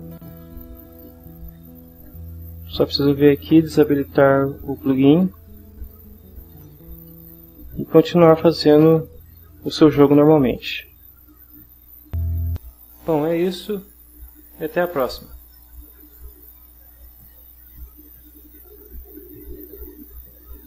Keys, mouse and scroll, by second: 0.1 click, 1.0 click, 1.8 click, 4.5 click, 6.4 click, 7.5-11.5 middle drag, 13.4 click, 14.2 scroll down 1, 15.8 click, 17.4-17.9 drag, 20.0 click.